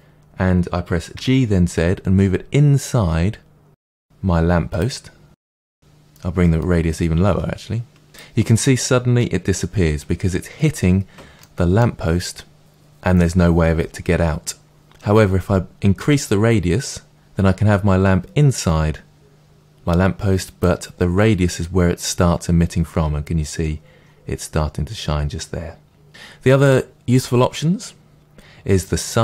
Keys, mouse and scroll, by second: 1.1 g, 5.1-6.6 middle drag, 6.6-11.3 drag, 11.3-15.9 middle drag, 15.9-29.2 drag.